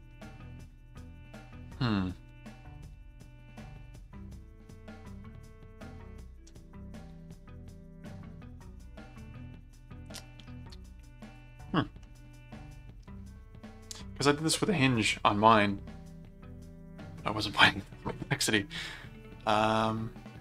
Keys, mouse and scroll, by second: 11.2 click, 12.0-14.2 middle drag, 18.5-20.4 middle drag.